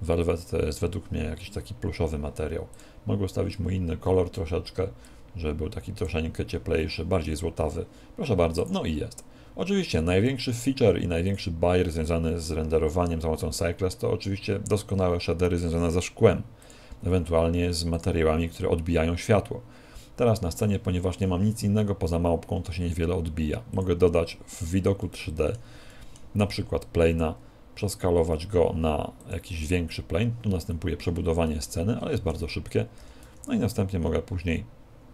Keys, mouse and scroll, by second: 2.8 click, 8.6 click, 16.6 click, 22.7 shift+a, 25.0 middle click, 25.9 middle click, 27.1 s, 29.3 click, 31.5 middle click, 33.0 g.